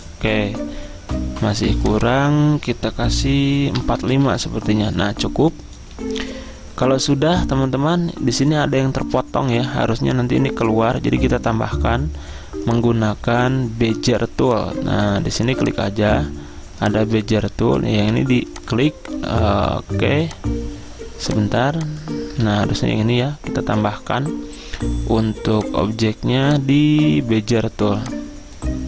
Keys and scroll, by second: 0.0-1.0 typing, 3.9-4.4 typing, 4.4 Return, 6.2 typing, 22.5 ctrl+z.